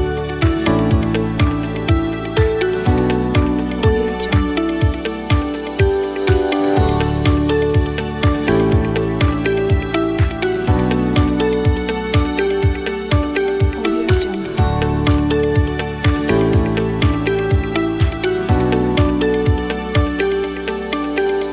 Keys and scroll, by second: 16.1 a, 18.0 x.